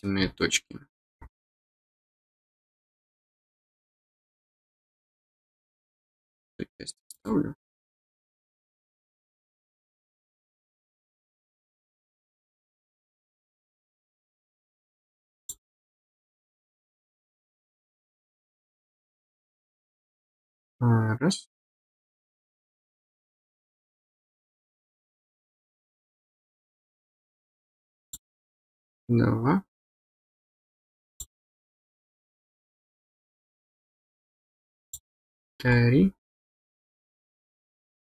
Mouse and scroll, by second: 3.0 click, 4.2 click, 5.6 click, 7.1 click, 8.5 click, 11.0-13.6 drag, 15.4 click, 19.5 click, 25.7 click, 28.0 click, 31.1 click, 34.8 click, 35.6-36.0 scroll up 4, 37.8 middle click.